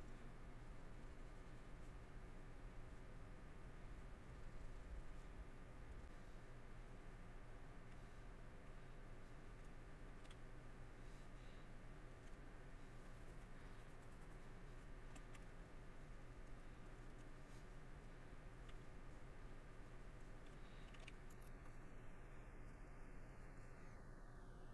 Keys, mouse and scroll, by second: 0.2 middle click, 1.8 middle click, 2.9 middle click, 4.0 middle click, 5.2 middle click, 6.0 middle click, 7.8 middle click, 11.1 middle click, 12.1 middle click, 15.4 middle click, 17.0 middle click, 18.6 middle click, 19.2 middle click, 19.7 middle click, 21.6 shift+middle click, 23.6 middle click.